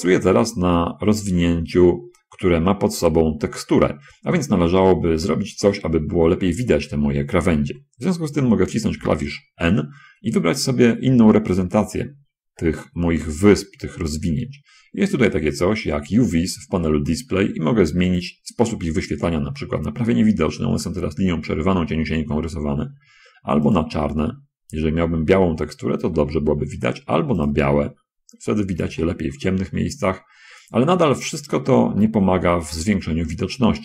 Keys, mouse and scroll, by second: 9.4 n, 12.0 middle click, 18.5 click, 18.8 middle click, 20.0 middle click, 20.8 middle click, 21.6-22.0 scroll down 2, 22.3-22.9 scroll down 2, 24.1 click, 25.3 middle click, 25.4 scroll up 1, 25.6 middle click, 27.6 click, 28.4-28.9 scroll up 1, 29.0 shift+click, 29.8 shift+middle click, 30.6-31.8 middle drag, 32.1 shift+click, 32.4-33.6 shift+middle drag.